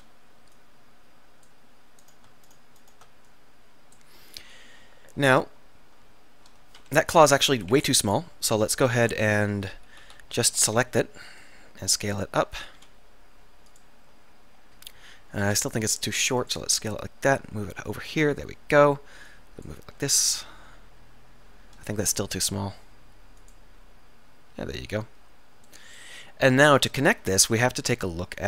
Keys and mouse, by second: 4.5 middle click, 7.1 KP_1, 7.8 KP_7, 9.1-10.8 typing, 12.9 s, 15.5 s, 19.4 click, 20.3 z, 22.3 z, 22.3 s.